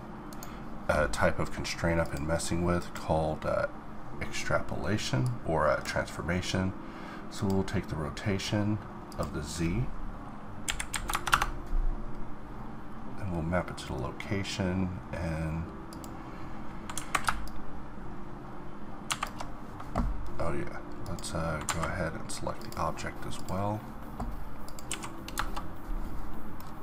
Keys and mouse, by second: 26.7-26.8 middle drag.